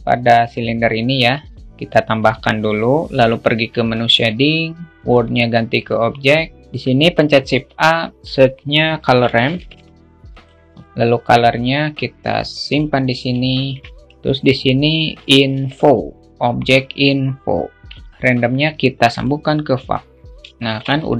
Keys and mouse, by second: 0.0-0.9 drag, 1.3 alt+shift+middle click, 1.6 click.